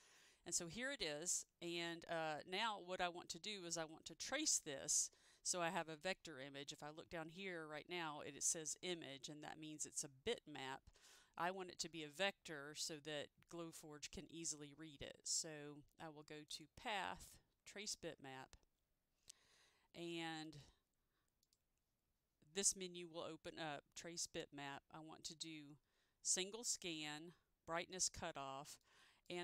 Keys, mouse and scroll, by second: 16.5 click, 16.6 click, 17.9 click, 20.6 click, 29.0 click.